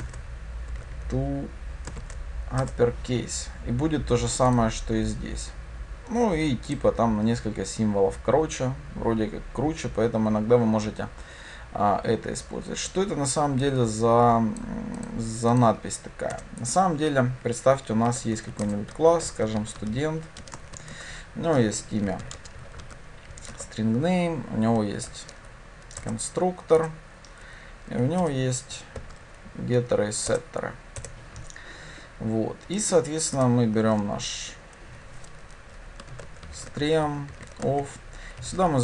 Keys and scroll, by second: 2.7 Return, 18.7 Return, 25.0 alt+Insert, 29.0 alt+Insert.